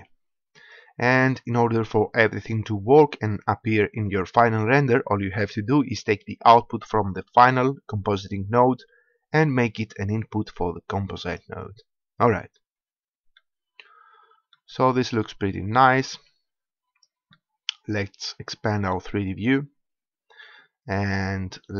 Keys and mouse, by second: 0.7-2.1 drag, 6.9-8.7 drag, 15.8 click.